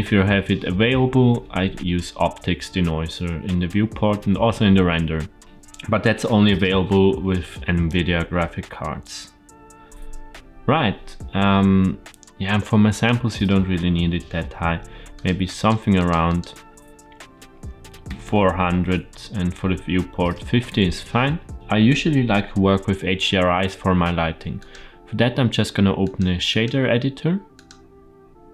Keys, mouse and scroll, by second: 12.8-15.2 drag, 15.5 click, 16.2-18.3 drag, 18.3 KP_0, 24.5-26.1 drag, 26.4-26.8 drag, 27.5-28.5 drag.